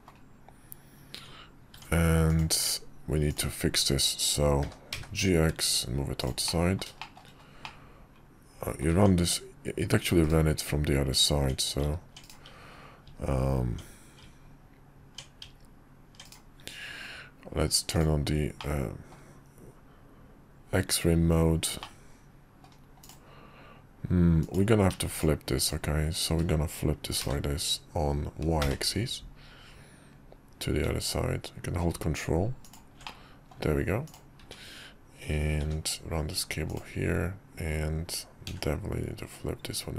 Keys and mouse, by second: 2.5 Tab, 3.3-4.6 drag, 4.6 g, 6.4 middle click, 7.0 shift+middle click, 7.6-8.8 middle drag, 8.9 Tab, 10.2 click, 10.9 Tab, 11.8 Tab, 12.3-12.6 drag, 13.0 Tab, 14.2 Tab, 15.4 Tab, 16.3-17.0 drag, 17.9 click, 18.6 middle click, 21.8 middle click, 23.0 click, 24.4 click, 25.1 shift+click, 25.6 shift+click, 27.2 r, 33.0 middle click, 34.0 click, 35.6 g, 38.5 r.